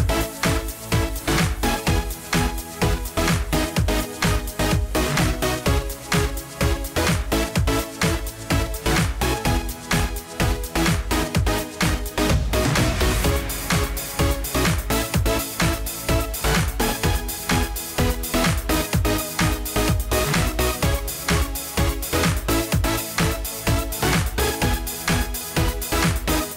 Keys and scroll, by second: 22.9 ctrl+a.